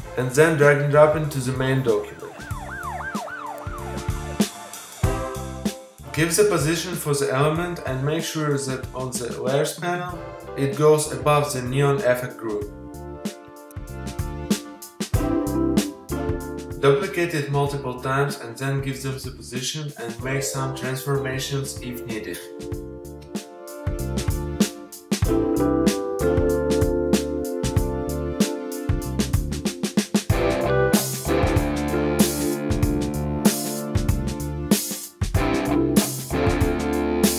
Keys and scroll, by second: 14.2 super+i, 15.3 space, 19.4 super+t, 22.4 Return, 34.4 z.